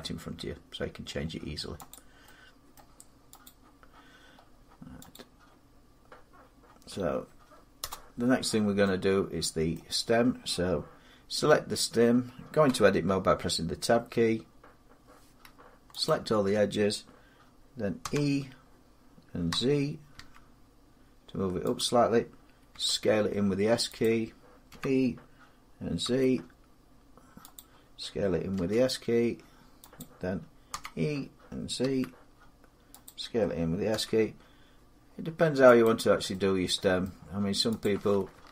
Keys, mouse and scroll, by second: 0.8-1.4 scroll, 1.7 click, 2.5 middle click, 3.2 click, 4.0 middle click, 4.1 middle click, 4.9 click, 6.2-7.5 scroll, 7.6 Return, 9.5 middle click, 12.4 Tab, 15.9 alt+click, 17.8 e, 19.3 x, 19.9 z, 21.6 click, 22.5 s, 23.8 click, 24.5 e, 25.8 z, 27.3 click, 28.3 s, 29.8 click, 30.5 e, 31.6 z, 32.8 click, 33.7 s, 35.6 click, 36.1 middle click, 36.8 scroll down 1, 38.2 click.